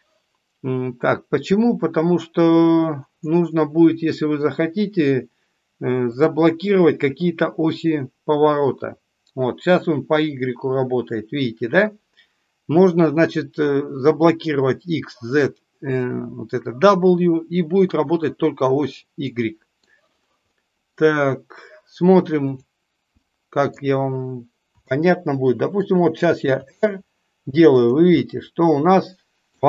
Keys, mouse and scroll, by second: 19.1-19.8 middle drag, 20.5-20.9 middle drag, 22.4 click, 23.1-23.8 middle drag, 24.9-25.6 shift+middle drag, 28.1-29.5 middle drag.